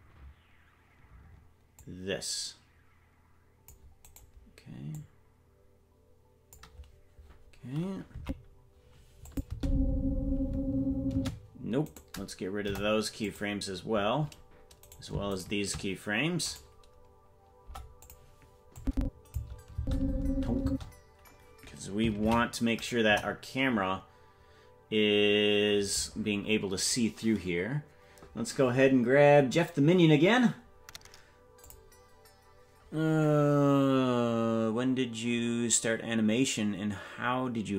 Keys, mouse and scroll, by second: 1.8-3.7 drag, 4.1 right click, 5.0-6.6 drag, 8.2 Left, 9.3 click, 9.5 space, 11.1 space, 11.8 right click, 12.6 Delete, 14.9 right click, 15.4 shift+right click, 16.4 right click, 17.6 Delete, 18.8 click, 19.7 space, 20.6 space, 24.5 ctrl+s, 24.5 KP_0, 31.6 click.